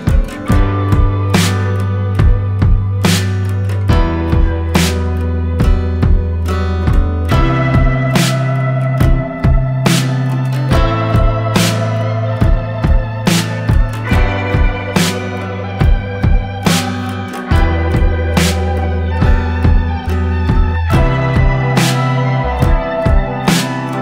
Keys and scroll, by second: 2.9-8.4 typing, 9.5-10.6 typing, 13.6-15.2 typing, 16.4 F8, 17.8-20.5 typing, 21.6 m, 22.7 Return, 23.2-24.0 typing.